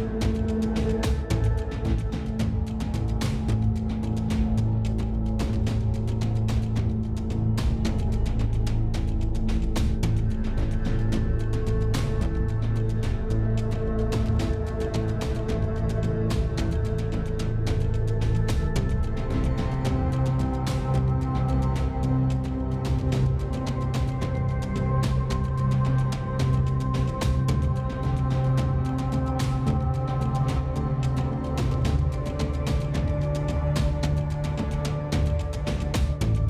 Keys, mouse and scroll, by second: 0.1 click, 2.6 g, 4.8 g, 7.2 click, 7.3 s, 9.9 s, 12.5 click, 13.2 Tab, 13.8 h, 14.1 Tab, 15.8 Tab, 16.0 middle click, 17.2-18.5 middle drag, 18.6 s, 20.8 click, 21.7 click, 22.5 s, 26.3 s, 28.6 Tab, 28.9-29.5 middle drag, 29.7 alt+h, 30.7 Tab, 31.2 a, 31.5 a, 32.4 Tab, 32.5 Tab, 33.6 a, 34.4 click, 34.8 middle click, 36.3 s.